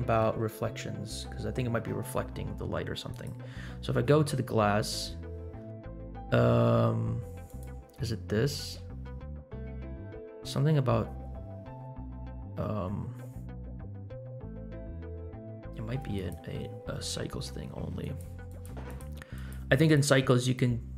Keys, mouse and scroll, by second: 3.1 click, 5.5-7.4 scroll down 11, 7.4 click, 9.8-10.5 scroll down 1, 11.4-12.2 scroll down 2, 16.1 click, 18.0 click, 18.4 click, 18.8 click, 19.3 click, 19.8 click.